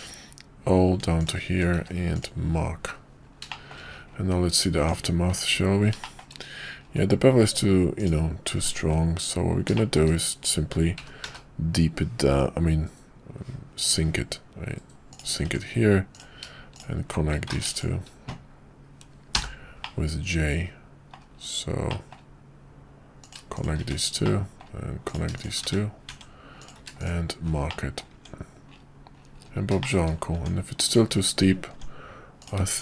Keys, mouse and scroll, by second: 1.7 q, 3.5 middle click, 5.0 Tab, 6.0 middle drag, 8.5 Tab, 9.7 shift+middle click, 11.0 g, 15.4 Tab, 16.1 click, 17.6 ctrl+z, 19.4 j, 19.8-21.1 middle drag, 21.9 middle click, 23.2 click, 23.9 1, 24.2 middle click, 25.0 click, 25.7 1, 26.1 Tab, 26.6 click, 26.8 q, 27.7 middle click, 28.1 Tab, 29.8 shift+middle click, 30.9 click, 31.7 Tab, 32.4 click.